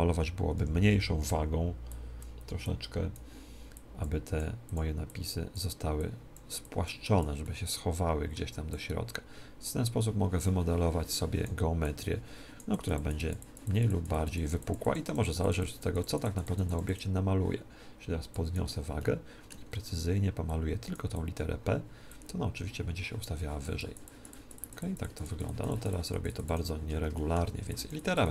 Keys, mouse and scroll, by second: 0.5 t, 1.8-10.5 drag, 7.3-9.2 middle drag, 11.7-20.0 drag, 18.9-23.5 middle drag, 20.5-27.1 drag, 27.1-28.3 middle drag.